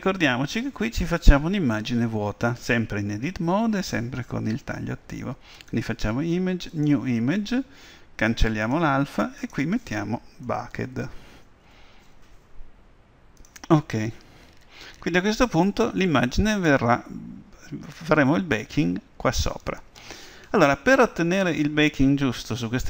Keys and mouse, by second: 5.7-7.6 drag, 21.4 Tab.